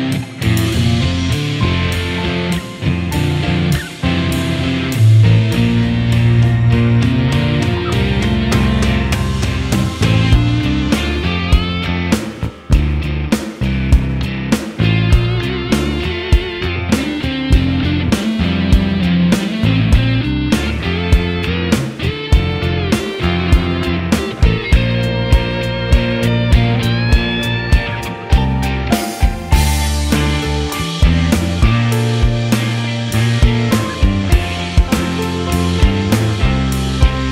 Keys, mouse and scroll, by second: 0.2 middle click, 0.3 scroll up 1, 0.4 middle click, 0.8 click, 1.0 click, 1.4 ctrl+s, 1.9 click, 2.0 KP_1, 2.1 shift+middle click, 2.3 s, 2.8 click, 3.1 KP_3, 3.2 s, 4.3 click, 4.5 ctrl+r, 4.9 click, 5.5 s, 5.8 ctrl+r, 6.0 click, 6.1 s, 6.4 KP_1, 6.6 click, 6.8 click, 6.8 click, 7.4 click, 8.1 middle click, 8.3 scroll down 1, 8.3 middle click, 8.6 KP_1, 8.9 click, 9.2 middle click, 10.3 click, 10.4 s, 11.0 click, 11.2 ctrl+r, 11.5 s, 11.8 middle click, 12.0 KP_1, 12.1 scroll up 5, 12.1 shift+middle click, 12.4 shift+middle click, 12.5 click, 13.0 s, 13.2 click, 13.5 s, 13.7 middle click, 13.8 scroll down 1, 13.9 middle click, 14.5 middle click, 14.8 alt+click, 14.9 alt+shift+click, 15.1 middle click, 15.6 click, 15.9 alt+shift+click, 16.0 alt+shift+click, 16.1 middle click, 16.4 shift+click, 16.7 shift+middle click, 17.1 ctrl+e, 17.3 middle click, 17.5 click, 17.7 x, 17.9 scroll down 3, 18.0 middle click, 18.4 ctrl+z, 18.5 ctrl+z, 18.6 ctrl+e, 18.9 scroll up 1, 18.9 middle click, 19.1 click, 19.3 x, 19.6 ctrl+z, 19.7 x, 19.9 scroll down 1, 20.0 middle click, 20.5 middle click, 21.0 scroll up 3, 21.1 shift+middle click, 21.3 KP_1, 21.4 shift+middle click, 21.5 shift+middle click, 21.8 click, 22.0 click, 22.4 shift+middle click, 22.5 scroll down 1, 22.6 middle click, 22.8 click, 22.9 shift+middle click, 23.0 shift+click, 23.3 shift+d, 23.4 middle click, 23.5 click, 24.0 middle click, 24.4 middle click, 24.9 scroll up 2, 25.0 middle click, 25.2 ctrl+r, 25.6 ctrl+z, 25.7 ctrl+r, 26.0 middle click, 26.3 alt+shift+click, 26.9 s, 27.2 middle click, 27.5 Tab, 27.5 middle click, 28.1 middle click, 28.3 scroll up 4, 28.3 shift+middle click, 28.4 shift+middle click, 28.5 click, 28.7 Tab, 29.1 g, 29.3 x, 29.6 middle click, 29.7 alt+click, 29.8 l, 29.9 g, 30.0 scroll down 2, 30.1 middle click, 30.2 middle click, 30.7 scroll up 2, 30.7 shift+middle click, 30.9 shift+middle click, 31.1 scroll down 1, 31.2 Tab, 31.3 middle click, 32.7 Tab, 32.7 middle click, 33.1 Tab, 33.2 middle click, 33.3 click, 33.4 middle click, 33.5 scroll up 2, 33.6 shift+middle click, 33.7 shift+middle click, 33.9 alt+shift+click, 34.1 middle click, 34.5 middle click, 34.7 middle click, 35.1 alt+shift+click, 35.1 middle click, 35.7 alt+shift+click, 35.9 ctrl+e, 36.1-36.5 scroll down 3, 36.1 middle click, 36.2 Tab, 36.2 middle click, 36.5 middle click, 37.2 middle click.